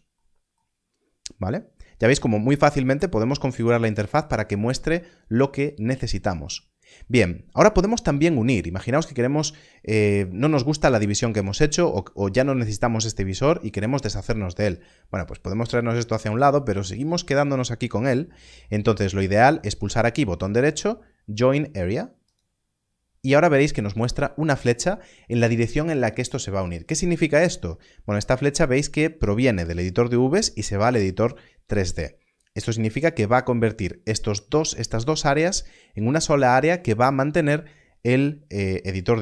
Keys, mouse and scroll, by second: 0.1 middle click, 14.6 middle click, 19.7 right click, 22.2 click.